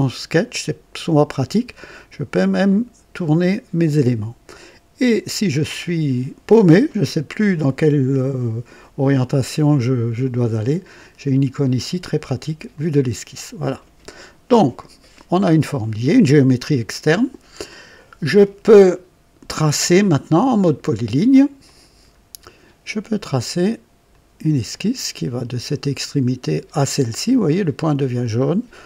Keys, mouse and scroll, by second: 2.1-5.8 drag, 12.7 click, 21.6 click, 24.0 click, 27.9 click.